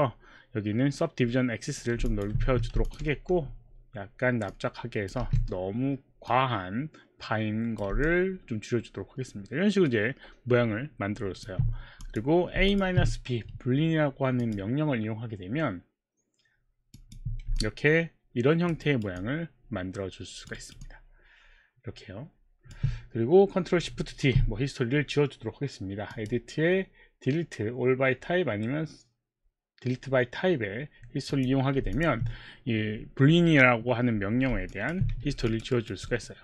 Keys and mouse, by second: 1.3 middle click, 2.3 alt+click, 2.4 w, 3.0 alt+click, 3.0 w, 3.4 alt+click, 3.4 r, 4.5 click, 5.3 w, 8.1 alt+click, 12.1 click, 12.7 shift+click, 14.4 click, 17.0 click, 17.8 alt+click, 18.8 alt+right click, 19.8 alt+click, 20.6 alt+right click, 20.8 alt+click, 21.5 alt+click, 26.1 click, 31.3 click, 32.2 alt+click, 34.7 alt+click, 35.1 q, 35.4 alt+click, 35.8 alt+right click, 36.1 alt+middle click.